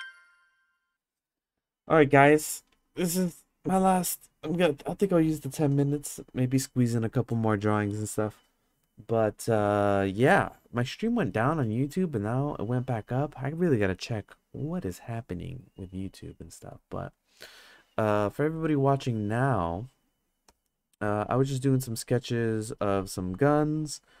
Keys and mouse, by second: 21.5 click, 23.3-24.2 drag.